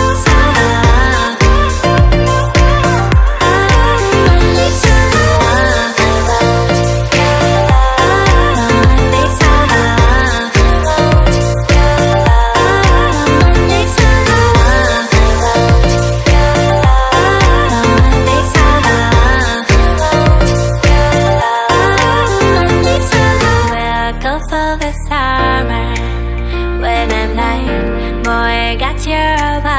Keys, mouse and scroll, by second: 0.1 click, 1.1 click, 2.0 click, 3.6 click, 4.5 click, 6.3 click, 6.9 click, 9.3 click, 9.4 click, 10.4 click, 10.5 click, 11.3 click, 13.1 click, 13.7 click, 14.3 click, 15.0 click, 17.8 click, 18.7 click, 19.5 click, 22.1 click, 22.9 click, 24.4 click, 25.3 click, 27.0 click.